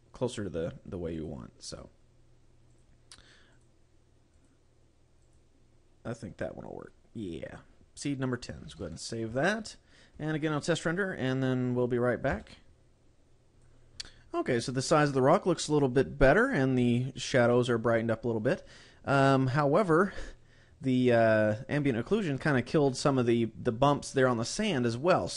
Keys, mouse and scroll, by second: 1.1 click, 1.6 click, 2.6 click, 3.4 click, 4.3 click, 5.2 click, 8.7 ctrl+s.